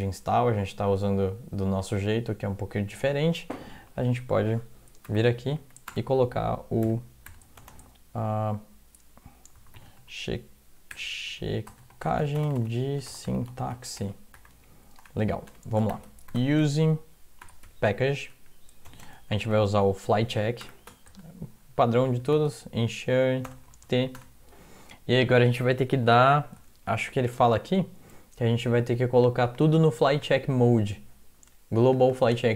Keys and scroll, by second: 0.9 alt+Tab, 3.8 Down, 4.0 Down, 4.2 Down, 4.4 Down, 5.1 Return, 5.6 Up, 5.9 Return, 6.8-7.6 typing, 9.3-23.6 typing, 15.0 Return, 24.2 Return, 26.4-28.4 typing.